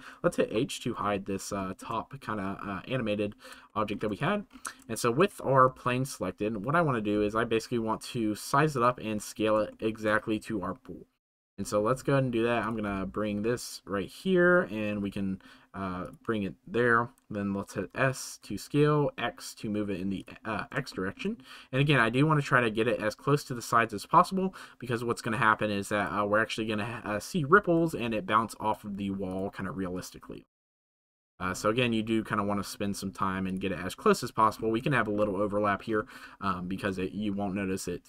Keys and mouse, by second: 1.7 middle click, 3.7 shift+middle click, 4.1 middle click, 4.9-5.2 shift+middle drag, 8.7 middle click, 9.7 middle drag, 12.6 click, 16.0 click, 21.0 shift+click, 26.0 click, 29.3 click, 33.4 click, 34.9 shift+middle drag, 36.6 shift+middle click.